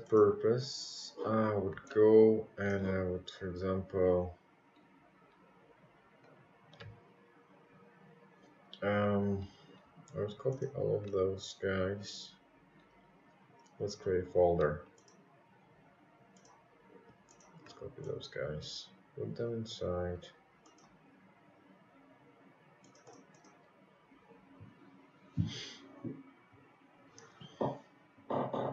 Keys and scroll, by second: 25.8 ctrl+c, 26.1 ctrl+v.